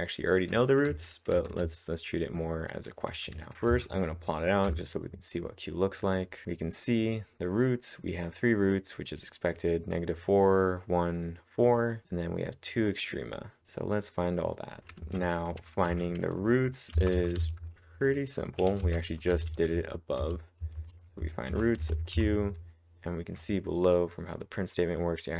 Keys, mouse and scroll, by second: 0.0-4.0 typing, 4.7 Return, 6.4 alt+Tab, 6.4 click, 14.8 click, 15.0-22.3 typing, 17.9 click.